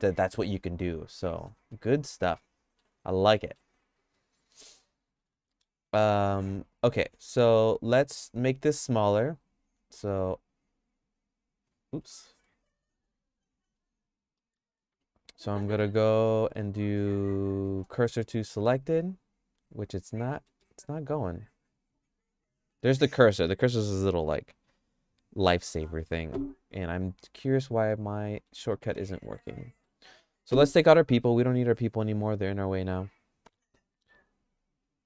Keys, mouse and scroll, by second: 1.2 middle click, 1.7-2.8 shift+middle drag, 3.3 middle click, 4.0 click, 4.6 middle click, 4.9 shift+middle click, 5.3 Tab, 6.5 Tab, 7.0 q, 8.5 Tab, 9.7 q, 11.9 Tab, 14.4 middle click, 14.9 Tab, 15.4 middle click, 15.8 middle click, 16.5 right click, 17.6 shift+s, 20.3 middle click, 20.7-22.8 shift+middle drag, 27.9 shift+middle click, 28.7 middle click, 29.2 shift+middle click, 34.9 click.